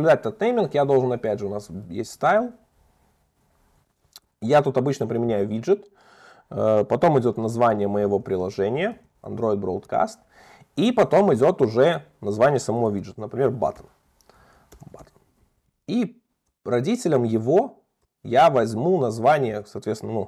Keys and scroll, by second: 2.5 Return, 19.6 Return.